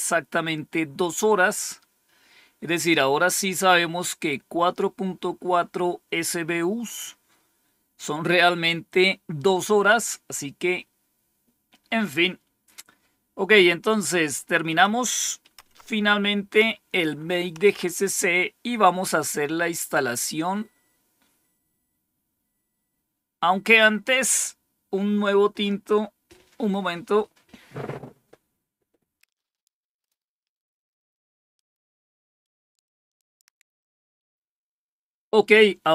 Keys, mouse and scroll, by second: 14.5 click, 15.5 Up, 17.5 Down, 19.6-20.0 scroll down 1, 20.4-21.9 scroll down 3.